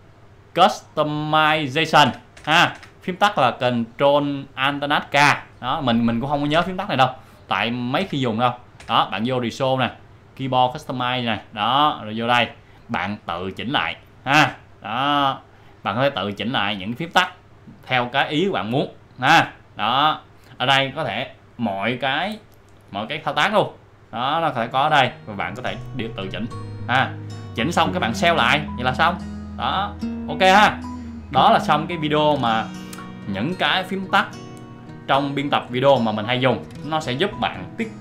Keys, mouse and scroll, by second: 10.7 click, 13.4 scroll down 1, 14.8 scroll up 1, 14.9 scroll down 1, 15.9 scroll up 1, 16.3-16.7 scroll down 1, 17.3 scroll up 1, 17.6-18.2 scroll down 1, 18.9-19.3 scroll down 1, 20.0 scroll up 1, 20.1-21.0 scroll down 1, 21.6-22.5 scroll down 1, 22.9-24.0 scroll down 1, 26.3-26.8 scroll up 1, 27.4 scroll up 1, 30.1 click.